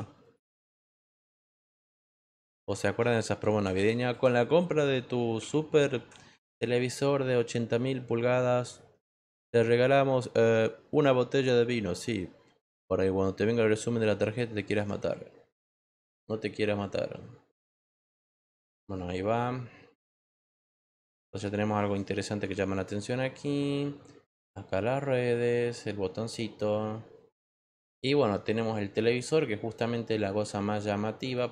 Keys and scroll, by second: 1.5 3, 2.3 q, 3.6 BackSpace, 4.1 BackSpace, 5.3 2, 5.9 x, 6.3 1.